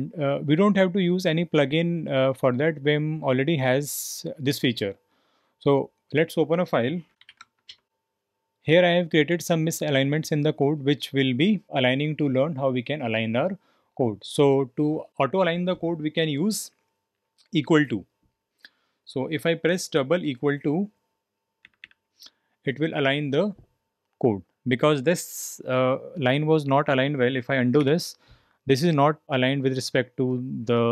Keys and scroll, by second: 6.9-7.8 typing, 21.6 typing, 27.8 typing.